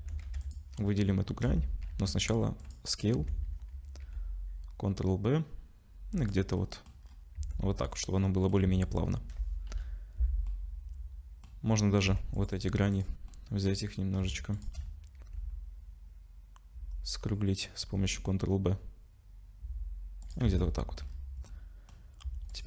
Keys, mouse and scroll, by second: 0.0 Tab, 0.2 2, 0.4 click, 1.5 Tab, 1.9 ctrl+a, 3.2 Tab, 4.0 ctrl+b, 6.6 middle click, 7.0-8.2 scroll down 4, 7.4 Tab, 8.2 middle click, 8.6 Tab, 9.7 /, 10.5 middle click, 11.6-12.0 scroll up 2, 12.0 2, 12.4 click, 12.9 click, 13.3 middle click, 13.9 scroll up 3, 14.5 shift+click, 14.7 shift+click, 15.2 ctrl+b, 20.5 Tab, 20.7 middle click, 21.1-21.5 scroll down 4, 21.5 middle click, 22.5 shift+click.